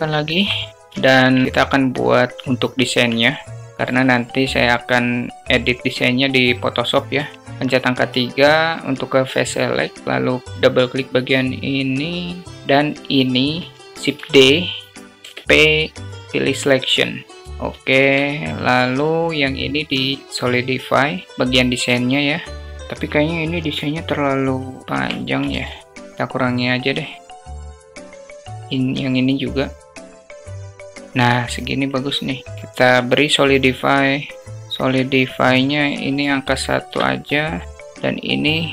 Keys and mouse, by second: 0.2 Delete, 0.8 alt+shift+drag, 2.8 Tab, 7.0 3, 9.8 click, 12.8 shift+click, 14.1 shift+d, 15.1 p, 17.9 Tab, 18.6 click, 20.4 click, 21.0 Tab, 21.2 click, 24.8 Tab, 25.4 alt+z, 26.1 2, 26.2-27.9 drag, 28.2 click, 29.3-30.4 drag, 30.5 Tab, 30.7 alt+z, 30.9-32.5 drag, 32.7 click, 33.2-34.3 drag, 34.5 alt+click, 35.7-37.0 drag, 37.9 click.